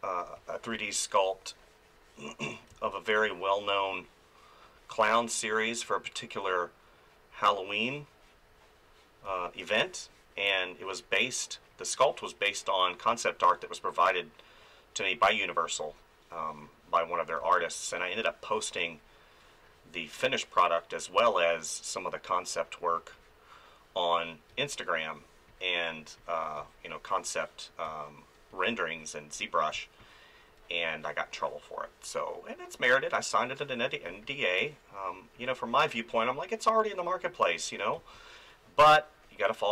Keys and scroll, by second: 2.7 space, 9.3 space, 15.8 space, 17.4 space, 24.5 space, 26.6 space, 29.7 space, 34.1 space, 38.0 space.